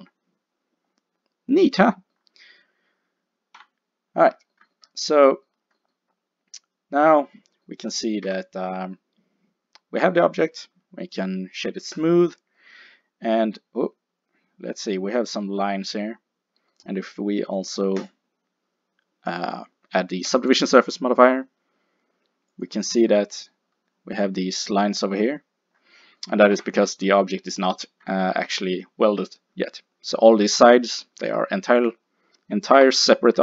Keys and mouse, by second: 3.6 KP_5, 8.3 Tab, 8.3 \, 12.0 click, 13.8 middle click, 18.0 click, 22.6 click, 24.9 middle click, 26.6 Tab, 30.5 g, 31.8-33.4 drag, 32.8 l.